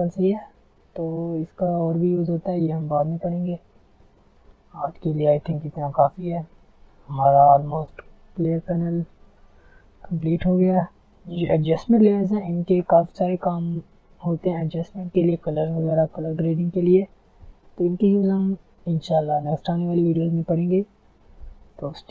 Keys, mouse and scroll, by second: 0.0 alt+scroll up 1, 1.7 click, 3.5 alt+scroll up 1, 3.9 alt+scroll down 1, 5.7 alt+scroll up 1, 6.4-7.3 alt+scroll down 1, 12.0-14.9 drag.